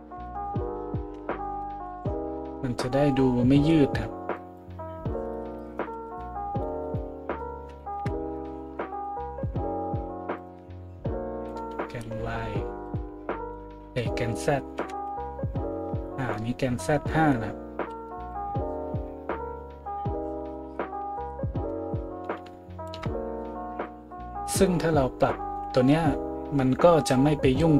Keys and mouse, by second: 8.9 middle click, 8.9 right click, 11.9 a.